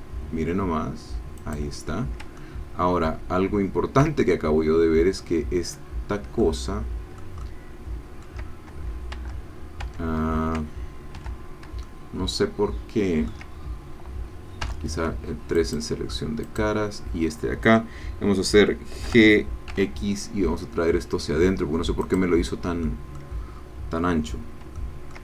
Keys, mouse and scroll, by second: 1.4 click, 2.4-7.4 ctrl+middle drag, 7.4-8.8 ctrl+drag, 9.1 Tab, 9.9 Tab, 11.2 2, 11.8-13.9 ctrl+drag, 14.8 3, 15.5 click, 16.7 click, 19.0 g, 19.7 x, 22.1 click, 22.8-24.6 middle drag, 24.8 shift+middle click.